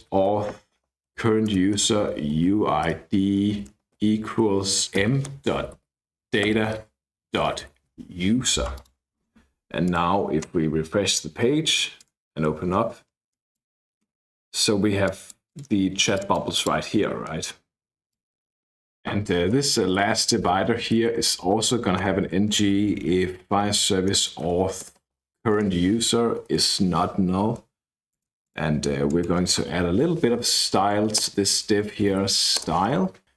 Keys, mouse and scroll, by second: 0.0-8.2 typing, 8.7 click, 9.8 click, 12.0-13.6 drag, 15.0 click, 16.1 click, 18.1 click, 19.3-22.0 typing, 23.3-25.5 typing, 28.1 click, 29.0 click, 30.0 Right, 31.2 Return, 31.8-33.3 typing.